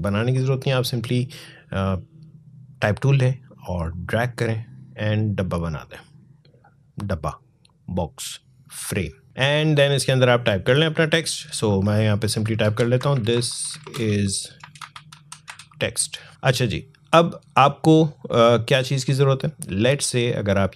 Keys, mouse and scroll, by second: 3.7-7.9 drag, 12.2-15.4 typing, 19.9-20.7 drag.